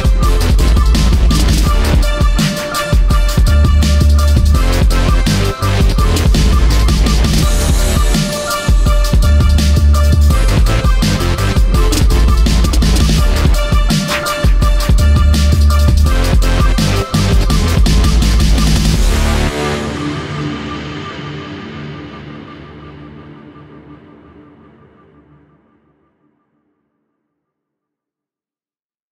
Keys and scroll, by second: 1.2 ctrl+z, 3.6 space, 10.5 ctrl+Delete, 11.1 Delete, 19.0 space, 22.3 space, 25.9 space, 26.9 Delete.